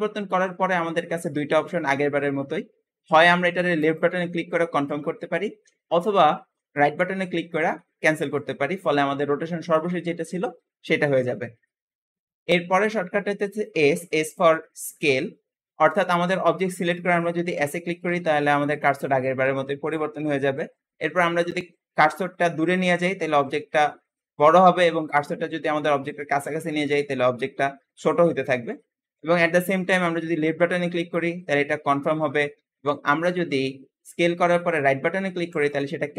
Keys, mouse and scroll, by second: 4.7 ctrl+z, 5.4 r, 17.4 s, 32.5 ctrl+z, 33.2 s.